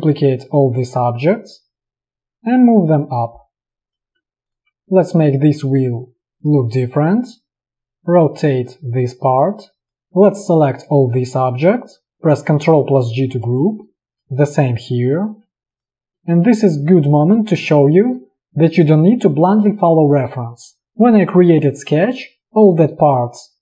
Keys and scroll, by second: 12.6 ctrl+g, 13.7 space, 15.2 ctrl+g.